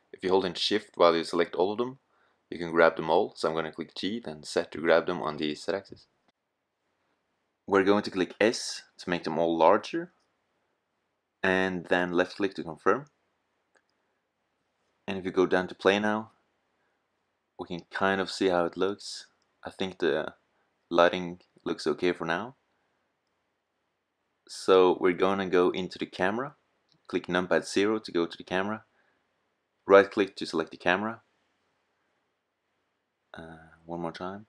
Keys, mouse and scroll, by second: 2.2 g, 3.0-5.2 middle drag, 7.3-9.3 middle drag, 8.7 s, 11.4 click, 26.2 KP_0, 26.5-29.5 middle drag, 31.1 click, 34.3 shift+f.